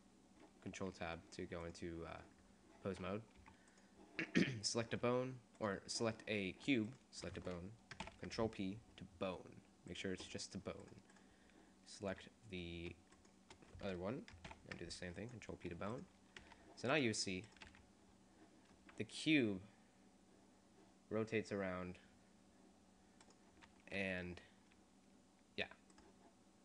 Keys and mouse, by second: 3.4 a, 8.2 ctrl+p, 10.8-13.1 drag, 13.2-15.0 drag, 14.6 ctrl+p, 15.8 a, 16.0-17.0 drag, 16.4 g, 17.6 click, 17.8 r, 18.0 click, 19.1 click, 24.1 r, 26.1 click.